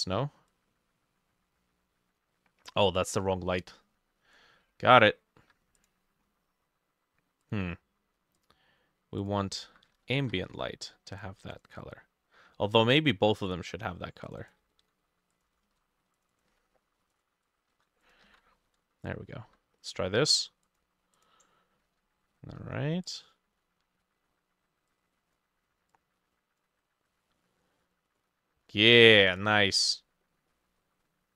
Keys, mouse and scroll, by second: 5.5 Escape, 9.7 F2, 10.2 ctrl+c, 11.6-13.7 drag, 14.4-20.3 ctrl+drag, 14.6 ctrl+middle click, 15.6 ctrl+shift+middle click, 15.7 ctrl+shift+d, 16.4 ctrl+middle click, 16.5 ctrl+v, 17.5 shift+middle click, 17.8 shift+4, 18.3 middle click, 18.6 ctrl+s, 30.0-31.3 drag, 30.0 middle click, 30.5 middle click.